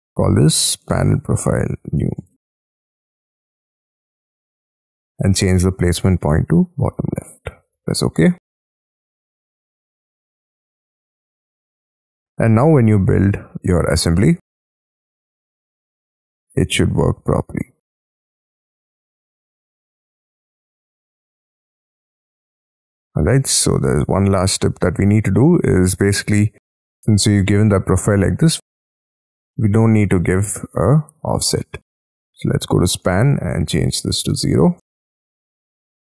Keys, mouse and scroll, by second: 0.6-4.3 typing, 9.9 middle click, 10.6 space, 10.7 scroll down 6, 11.0 Escape, 11.7 middle click, 12.0-12.9 scroll down 10, 12.2 Escape, 12.5 Escape, 12.9 Escape, 19.3 space, 19.6-20.6 scroll up 20, 20.6 middle click, 21.3 scroll down 2, 21.6 shift+middle click, 22.1 middle click, 23.0 scroll up 3, 23.3 scroll down 1, 23.3-23.7 scroll up 7, 23.7 middle click, 25.1 scroll down 3, 25.4-26.2 scroll up 7, 26.3-27.3 scroll down 13, 27.3-27.8 scroll up 6, 27.8-28.6 scroll down 9, 28.8-29.4 scroll up 8, 29.6 middle click, 34.2 0.